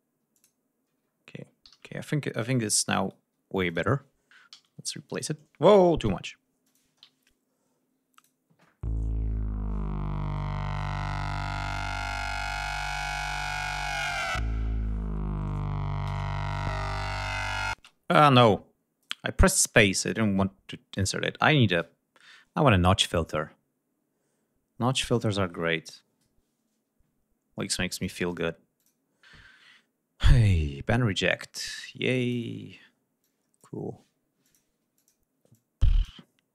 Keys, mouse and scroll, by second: 0.3 click, 1.1 ctrl+scroll down 2, 1.6 ctrl+g, 1.8 ctrl+scroll down 2, 2.5-3.1 ctrl+drag, 3.5 Delete, 3.6 click, 4.5 alt+d, 6.0 Delete, 6.6 click, 6.8 space, 7.5-8.1 ctrl+scroll up 4, 8.1 ctrl+click, 11.7 click, 12.6 right click, 17.7 space, 18.3 click, 19.1 right click, 20.0 click, 20.9 right click, 25.1 click, 27.9 click, 28.2 click, 28.8 click, 30.2 click, 31.3-32.5 drag, 33.2 click, 34.4 click, 34.9 click, 35.5 click.